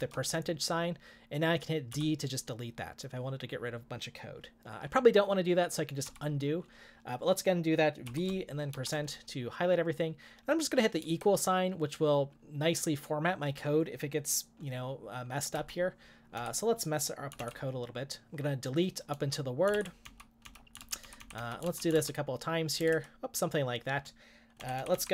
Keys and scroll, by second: 0.0-0.5 typing, 1.9 d, 6.1 u, 8.0 v, 8.7 shift+5, 11.0 =, 15.6-17.9 typing, 19.1-23.3 typing, 24.6-24.9 typing.